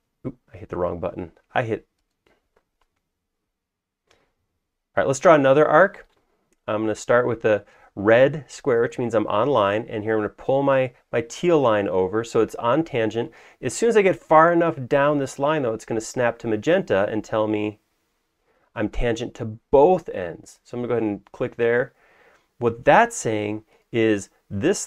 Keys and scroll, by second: 0.7 Escape.